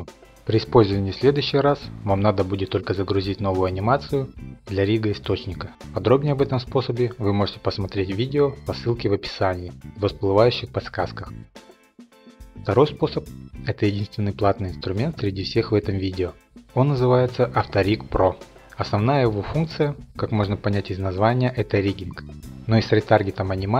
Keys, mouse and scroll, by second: 0.7 click, 1.1 click, 1.7-2.2 scroll, 2.3 click, 2.8 click, 4.1 click, 5.0 click, 5.3 click, 5.4 click, 5.7 ctrl+Tab, 5.9 click, 6.3 click, 7.6 click, 7.9 click, 8.3 click, 8.9 shift+click, 9.2 x, 9.4 click, 9.9 click, 10.0 middle click, 10.2 scroll, 11.1 click, 11.4 click, 12.8 click.